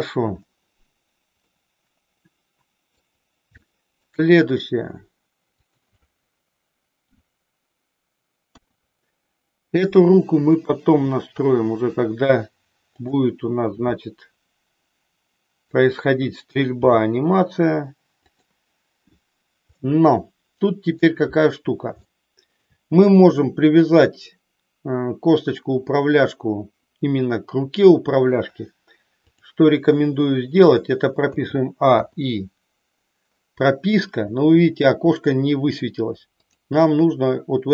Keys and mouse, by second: 1.4-3.0 middle drag, 3.7 shift+middle click, 5.4 click, 7.1 KP_1, 8.4 KP_3, 10.8 g, 13.8 r, 16.7 g, 19.7-21.0 middle drag, 22.1 shift+middle click, 29.3-30.3 drag, 31.3 a, 32.0 i, 36.4-37.7 drag.